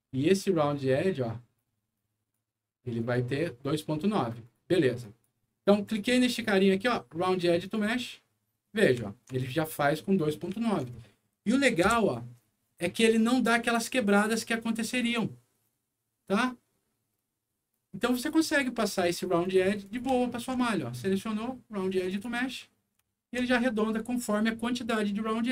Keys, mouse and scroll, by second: 0.6 click, 1.9 click, 2.9 click, 4.0 middle click, 4.4 click, 5.0 click, 5.8 click, 7.6 click, 9.0 alt+middle click, 9.5 alt+scroll up 2, 10.5 alt+middle click, 11.0 alt+middle click, 11.8 F9, 13.6 click, 17.0 scroll up 1, 18.1 click, 18.8 middle click, 19.4 middle click, 19.8 click, 20.2 alt+middle click, 20.7 alt+scroll up 2, 22.0 alt+click, 23.0 alt+middle click, 23.5 alt+scroll down 2, 23.9 scroll up 1, 24.4 alt+middle click.